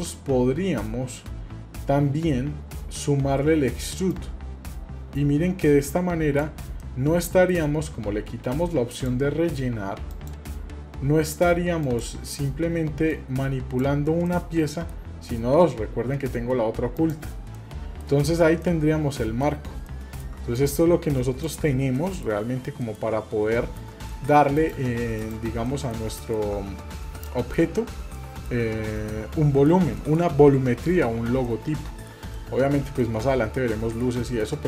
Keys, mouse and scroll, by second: 4.1-6.4 drag, 6.8 middle click, 8.0-8.3 scroll up 1, 8.7 scroll up 2, 8.9-10.3 drag, 11.8-13.8 drag, 14.3-14.9 middle drag, 17.0 click, 17.6-18.0 middle drag, 18.3-18.6 scroll up 2, 18.6-19.4 middle drag, 19.5 scroll down 2, 19.9 shift+middle click, 20.5 click, 21.4 click, 22.0 middle click, 22.8 shift+middle click, 23.5 middle click, 24.2 shift+middle click, 24.5 click, 25.2 click, 25.7 middle click, 26.2 shift+middle click, 26.7 scroll up 1, 27.2-27.7 shift+middle drag, 28.2-28.6 shift+middle drag, 29.1 shift+middle click, 30.0 shift+middle click, 31.5 middle click, 32.3-33.5 shift+middle drag, 34.2 middle click.